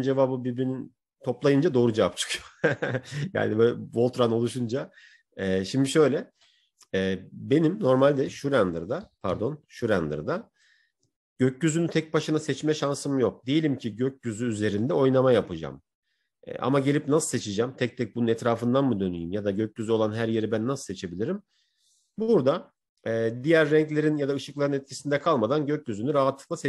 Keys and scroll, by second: 8.2 Left, 11.1 Left, 22.4 Left.